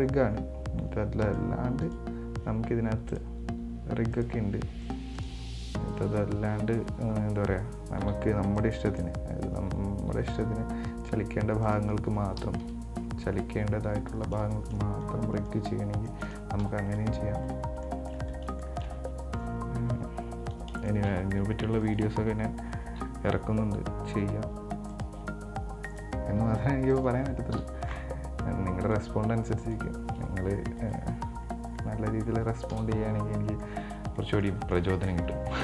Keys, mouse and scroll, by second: 0.1 right click, 1.5 right drag, 2.0 right click, 3.3-5.0 drag, 5.0 right click, 5.4 right click, 5.8 Tab, 6.2 Tab, 8.2 b, 10.3 g, 12.9 KP_3, 14.0-14.5 scroll up 2, 14.5 scroll down 2, 14.7-15.9 shift+middle drag, 15.9-16.2 scroll down 4, 16.2 shift+middle click, 16.9 KP_1, 17.6-18.0 scroll up 3, 18.0 shift+middle click, 18.5 scroll down 2, 18.9-20.5 shift+middle drag, 20.5-21.0 scroll up 4, 21.0-22.0 shift+middle drag, 22.0 right click, 23.6 g, 26.1 right click, 26.6 g, 27.8 KP_7, 29.0 right click, 29.9 right click, 31.0 right click, 31.7 scroll down 3, 32.0 middle click, 32.9 KP_1, 33.7 scroll down 3, 33.9 middle click, 34.8 scroll up 2, 34.9 middle click, 35.5 scroll up 1.